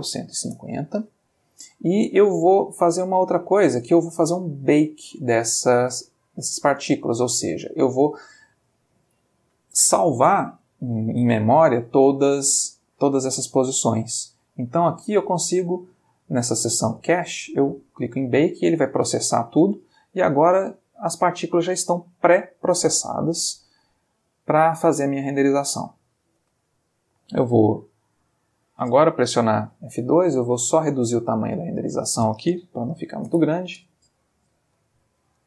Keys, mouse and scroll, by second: 0.0-0.3 typing, 0.5 Return, 3.7 click, 7.8 click, 8.9-9.5 middle drag, 10.1-11.1 middle drag, 12.1 click, 17.9 click, 20.9 space, 26.4 space, 27.8 click, 30.5 click, 31.7 click, 32.9 3, 33.0 0, 33.3 Return, 34.6 F12.